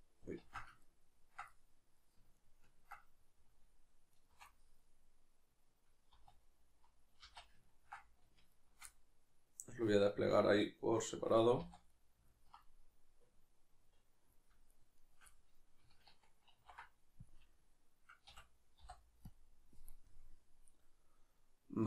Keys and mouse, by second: 0.4 ctrl+z, 0.8-1.5 ctrl+right drag, 1.5-2.4 middle drag, 2.4 ctrl+right click, 2.6 ctrl+right click, 4.1 alt+shift+right click, 4.6-8.5 middle drag, 6.2 z, 7.2 z, 8.5 alt+shift+right click, 8.9-14.7 middle drag, 11.6 z, 14.7 shift+right click, 15.0 shift+right click, 15.3-21.8 middle drag, 16.5 ctrl+e.